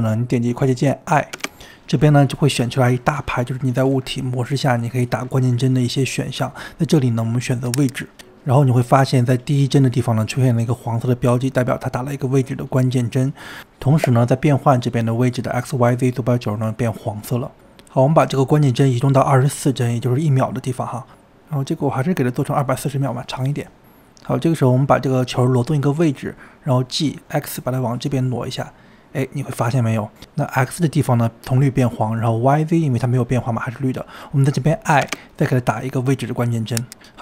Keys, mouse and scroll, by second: 18.5-19.1 drag, 19.1-20.0 scroll up 10, 20.0-21.3 drag, 22.3 click, 24.0 click, 26.2 g.